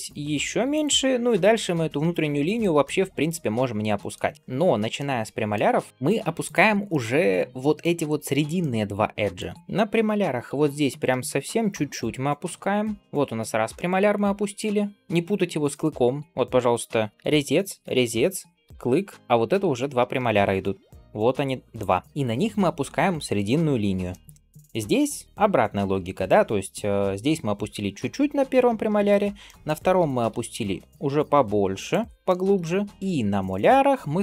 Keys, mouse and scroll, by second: 0.9 scroll down 2, 2.2 shift+middle click, 2.7-4.0 middle drag, 4.3 shift+middle click, 4.3 scroll up 1, 4.5-4.8 scroll down 1, 4.8 middle click, 5.6 scroll down 1, 6.3 shift+click, 6.7 middle click, 8.1-8.4 scroll down 1, 8.4 middle click, 9.5 scroll up 2, 9.9 g, 12.0 middle click, 13.0 scroll down 1, 13.6 middle click, 14.8-15.2 scroll down 2, 15.2 scroll up 1, 16.2 shift+middle click, 16.9 click, 17.1 l, 17.7 l, 19.2 middle click, 20.5 d, 20.7 click, 21.6 d, 21.7 d, 23.9 middle click, 24.1 scroll down 1, 24.8-25.8 scroll up 2, 28.9 scroll up 2, 29.3 middle click, 29.8 g, 32.1 shift+middle click, 32.6 scroll down 1, 32.9 shift+click, 32.9-34.0 middle drag.